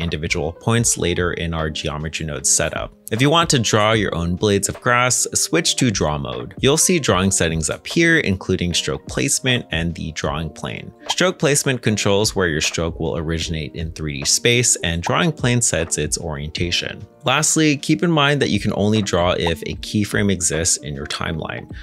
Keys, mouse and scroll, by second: 1.2 shift+middle click, 1.9 middle click, 5.2-5.8 scroll down 1, 5.8 shift+s, 5.9 ctrl+Tab, 20.0 ctrl+Tab.